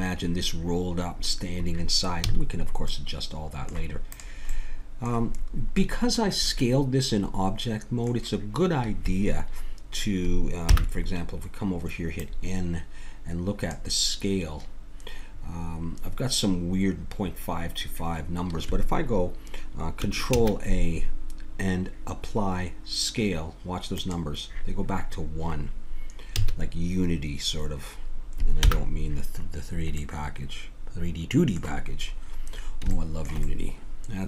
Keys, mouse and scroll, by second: 2.2 a, 2.4 middle click, 4.1 click, 5.8 middle click, 8.8-10.6 middle drag, 10.6 n, 12.1-14.0 drag, 20.3 ctrl+a, 26.3 a, 28.6 n, 29.6 middle click.